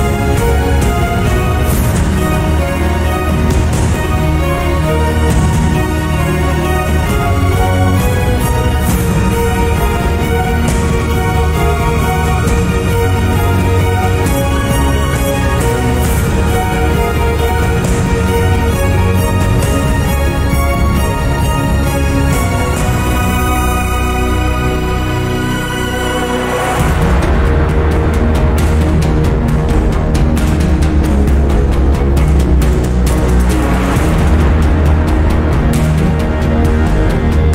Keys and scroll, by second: 4.6 8, 16.4 m.